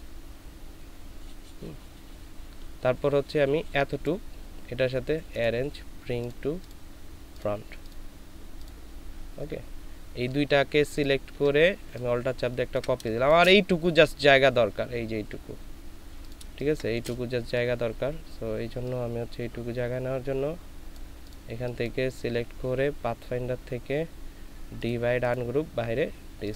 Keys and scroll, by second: 13.0 alt+shift+space, 16.5 ctrl+space.